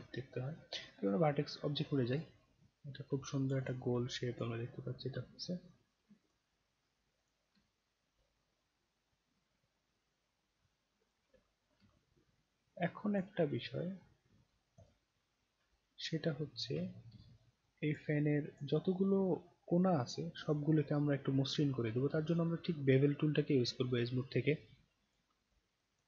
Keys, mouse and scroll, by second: 0.6-1.8 right drag, 2.1 click, 2.5 scroll down 1, 2.8 scroll up 1, 2.8 scroll down 1, 3.2-3.5 alt+drag, 3.6 click, 4.3 click, 4.7-5.1 scroll down 1, 5.3-5.9 alt+middle drag, 6.3 click, 7.2 click, 7.7-11.1 alt+drag, 11.9-13.2 alt+drag, 14.3-14.8 scroll down 3, 14.8 click, 15.3 scroll down 1, 15.8-16.2 alt+middle drag, 16.7 alt+scroll down 2, 17.2 alt+click, 18.2 alt+click, 18.9-19.6 alt+scroll up 2, 19.6-20.5 scroll down 1, 20.7 scroll down 1, 21.6-22.0 alt+middle drag, 22.2-24.0 right drag, 25.0 click, 25.8 shift+click.